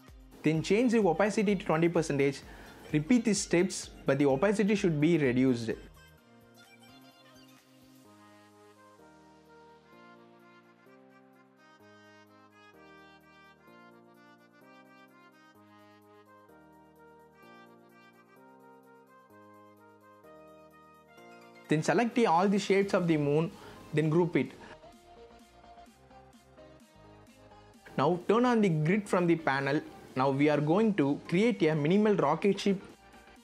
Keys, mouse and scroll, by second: 2.2 BackSpace, 2.9 KP_2, 3.2 KP_0, 4.4 click, 11.6 BackSpace, 13.0 KP_1, 14.1 click, 18.6 BackSpace, 18.9 KP_5, 19.5-23.8 drag, 27.9 v, 29.0 click, 30.3 z, 31.1-33.2 drag.